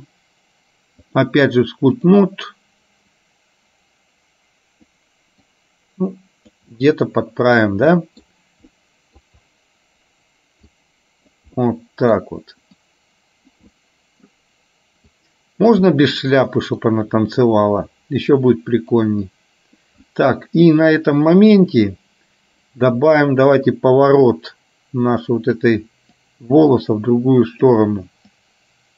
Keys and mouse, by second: 1.1-2.2 drag, 3.3-5.1 drag, 5.6-6.7 drag, 6.8 middle click, 8.1 middle click, 8.7 middle click, 10.8 click, 11.6 middle click, 12.8 click, 13.8 middle click, 15.2 click, 16.0 middle click, 18.3 click, 19.3 click, 20.1 middle click, 21.3 middle click, 22.8 click, 24.3-25.7 drag, 26.3-27.8 drag, 28.5 click.